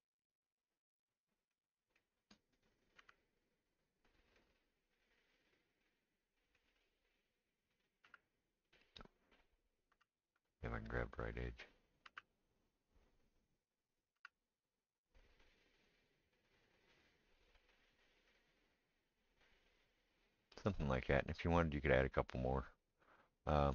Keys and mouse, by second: 2.6 click, 2.6-23.7 middle drag, 3.1 g, 7.8 click, 8.0 g, 9.3 click, 9.9 g, 11.3 click, 12.0 g, 13.9 click, 14.1 g.